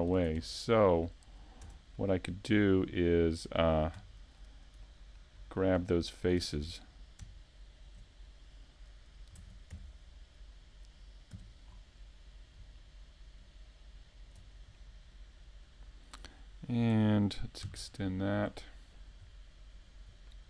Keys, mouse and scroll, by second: 0.6 right click, 1.0 shift+middle click, 1.9 middle click, 6.0-6.5 scroll down 2, 6.5 shift+middle click, 7.3-7.7 scroll down 1, 8.2 shift+middle click, 8.2 scroll down 3, 10.4 right click, 12.2 shift+d, 15.5 click, 16.2-17.1 scroll up 3, 16.5 middle click, 17.9 click.